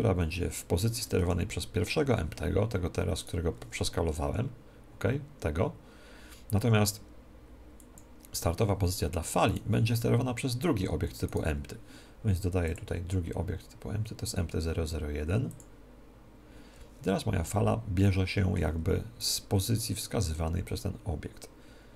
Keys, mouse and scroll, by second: 3.7-5.5 right drag, 4.5 s, 8.2-11.1 drag, 9.8-13.1 right drag, 12.8-17.5 drag, 17.5-19.7 middle drag, 19.7-21.1 right drag, 21.1-21.9 drag.